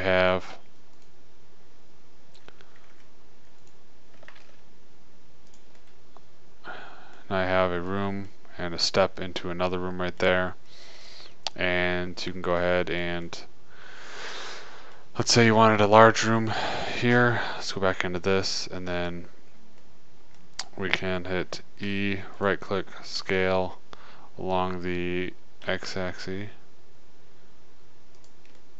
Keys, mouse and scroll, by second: 1.3-3.1 drag, 3.3 Tab, 4.1-5.1 drag, 4.9 shift+d, 5.7 click, 7.7-8.7 middle drag, 10.3 middle click, 11.2-14.5 middle drag, 15.5 middle click, 16.5-17.5 right drag, 17.5 click, 17.6 Tab, 22.2 e, 23.6 s, 24.1-25.3 middle drag.